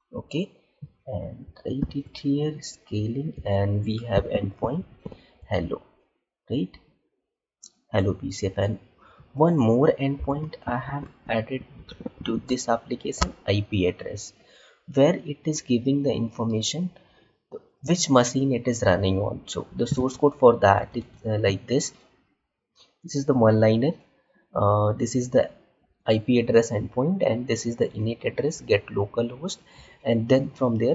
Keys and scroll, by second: 1.7 ctrl+v, 20.3 alt+Tab.